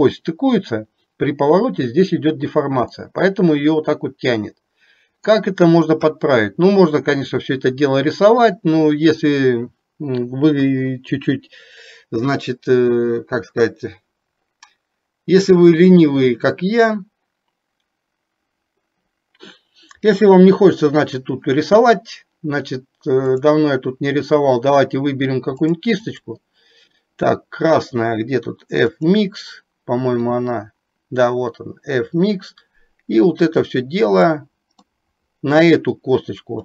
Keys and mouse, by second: 3.0-5.4 middle drag, 23.4-25.8 drag, 26.3-29.3 drag, 30.5-34.4 drag, 35.0 middle click.